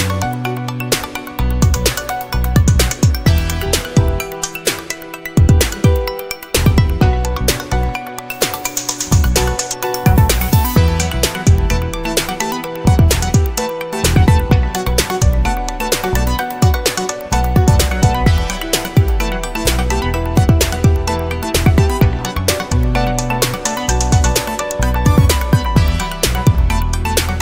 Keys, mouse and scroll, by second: 3.2 click, 4.2 click, 5.9-7.7 drag, 8.1-8.5 scroll up 1, 11.5-12.9 drag, 13.5 click, 14.9 click, 16.5 click, 17.4 click, 18.3-18.9 scroll down 2, 19.6 scroll up 1, 20.5-22.5 drag, 22.5-25.5 drag, 26.5 click, 27.0 click.